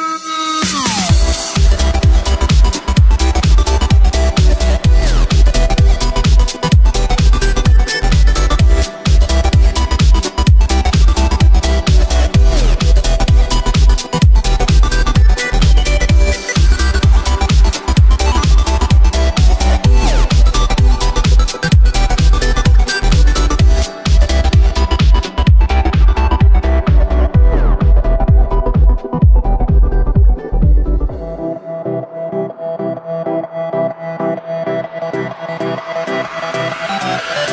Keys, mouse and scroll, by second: 1.8 right click, 2.2 s, 4.5 right click, 4.8 s, 6.2 right click, 6.5-7.6 middle drag, 7.6-8.0 scroll down 3, 8.0-8.8 middle drag, 8.8-9.2 scroll up 2, 9.2-11.3 middle drag, 11.3-13.2 drag, 13.2 s, 15.7 g, 17.1 scroll down 3, 17.4 right click, 17.6-19.6 middle drag, 19.6 scroll up 2, 19.8 right click, 20.2-21.5 middle drag, 21.5 ctrl+KP_1, 22.6-22.9 drag, 22.9 shift+a, 24.0 s, 26.8 s, 27.8 g, 28.9 s, 31.3-32.5 middle drag, 32.5 s, 36.7-37.5 middle drag.